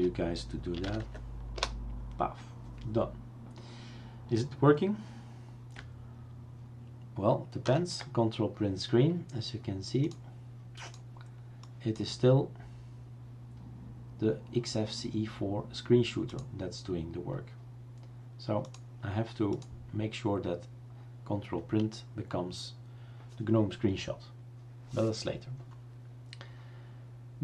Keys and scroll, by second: 1.0 Tab, 1.5 Return, 7.7 ctrl+Print.